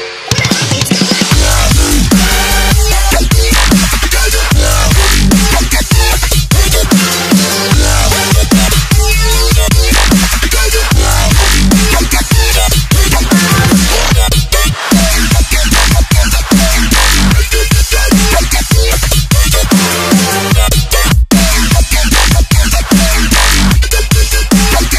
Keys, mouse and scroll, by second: 0.4 click, 1.8 click, 8.8 click, 11.7 scroll up 1, 13.2 click, 13.9 Return, 14.5 click.